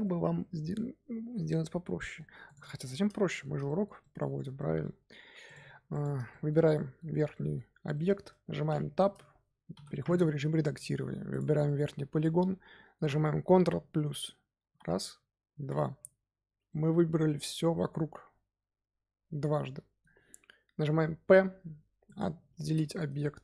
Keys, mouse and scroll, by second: 2.4 click, 2.6 scroll down 2, 2.8 Tab, 3.2-4.8 shift+middle drag, 4.8-5.4 scroll up 2, 5.4 click, 5.8 click, 6.2-8.6 shift+middle drag, 8.6 Tab, 9.7 3, 10.1-11.2 middle drag, 11.2 click, 11.6-14.6 middle drag, 14.6 ctrl+KP_Add, 15.5 ctrl+KP_Add, 16.6-19.7 middle drag, 21.2 p, 23.0 Tab.